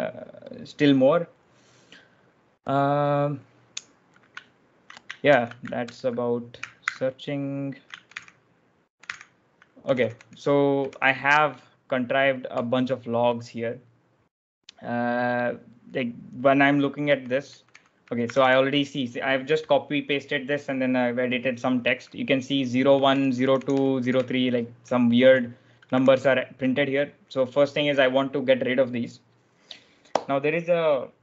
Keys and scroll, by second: 5.2 ctrl+j, 5.7 ctrl+j, 6.7 ctrl+f, 8.0 ctrl+j, 8.0 ctrl+l, 8.9 ctrl+j, 9.1 ctrl+l, 9.4-10.7 typing, 11.8-13.7 typing, 16.7-18.8 typing, 22.5-25.8 typing.